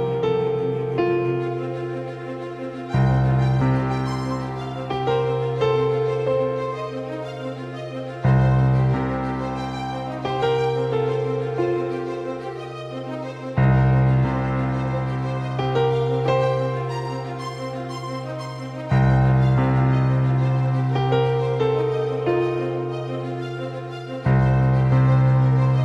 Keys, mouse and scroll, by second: 4.9-6.4 middle drag, 5.8 KP_5, 6.4 KP_5, 6.9 KP_1, 7.8 KP_3, 9.3 middle click, 10.1 middle click, 13.6-19.6 right drag, 19.0 ctrl+j, 20.9-23.3 right drag, 22.1 g, 25.1 ctrl+alt+shift+c.